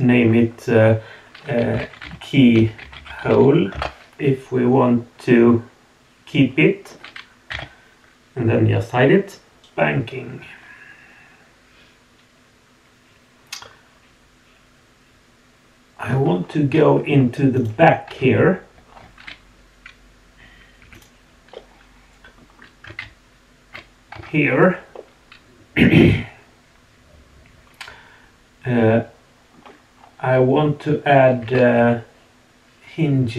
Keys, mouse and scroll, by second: 5.4-6.9 middle drag, 7.5 h, 9.6-10.6 middle drag, 9.6 scroll down 2, 10.6-12.7 drag, 12.7-14.2 middle drag, 14.5 middle click, 14.8-16.0 middle drag, 16.3 scroll up 1, 17.0-17.6 scroll down 3, 17.5 click, 18.1 Tab, 18.8 scroll up 2, 20.8 2, 20.9 click, 21.5 middle click, 23.0 shift+s, 24.2 Tab, 24.4 scroll down 2, 24.9-29.4 middle drag, 29.4 click, 30.0-30.9 scroll up 1, 30.0 middle click, 31.4 shift+a.